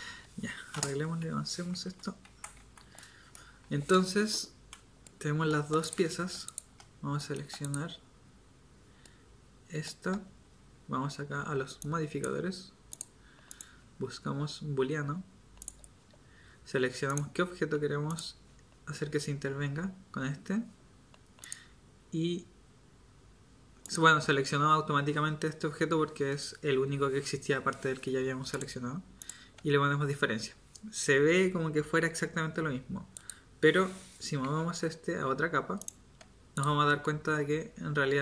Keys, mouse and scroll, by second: 1.0 Escape, 1.9 z, 2.2 z, 2.6 Tab, 34.4 m.